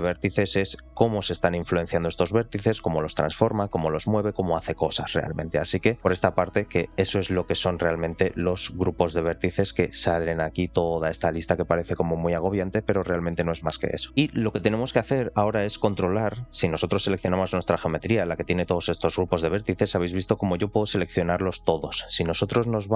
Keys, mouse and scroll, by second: 2.1-3.4 scroll down 3, 2.7 r, 5.4 click, 6.6-7.0 scroll up 2, 7.8-8.4 drag, 7.8-8.4 scroll up 1, 9.1 click, 10.0 scroll down 1, 10.6 scroll down 3, 12.2-13.3 scroll up 1, 14.1-15.4 scroll down 3, 19.6 click, 20.0 click, 20.8 click, 21.2 click, 22.5-22.9 drag.